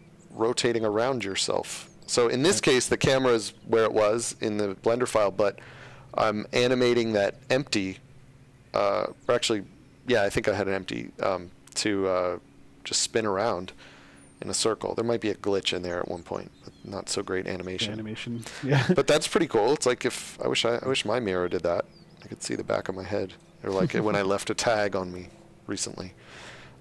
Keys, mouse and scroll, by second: 0.1 shift+scroll, 18.4 click.